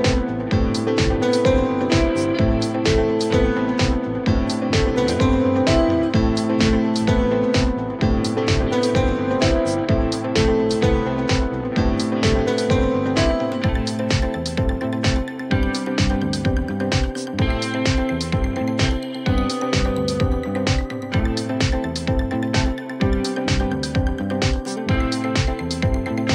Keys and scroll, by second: 11.4 ctrl+BackSpace, 13.3 ctrl+alt+e.